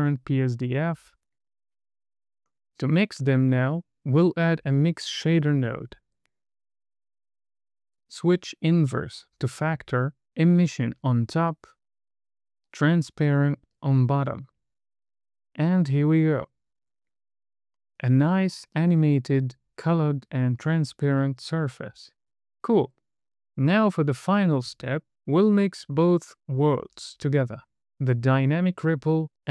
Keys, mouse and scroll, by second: 3.0 click, 3.4 scroll down 1, 3.7 middle click, 4.0 shift+a, 7.0 click, 8.9 click, 10.2 middle click, 11.4 drag, 13.2 scroll down 2, 14.0 middle click, 15.4 drag, 19.0 middle click, 27.4-27.8 scroll down 1, 28.4 click, 29.2-29.5 scroll down 2.